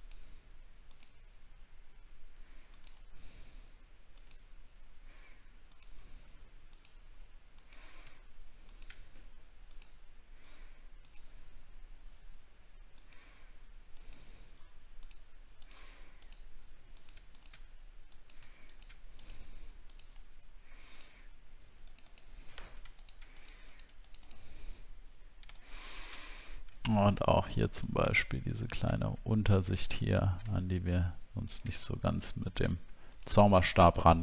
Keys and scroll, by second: 26.4 alt+scroll up 6.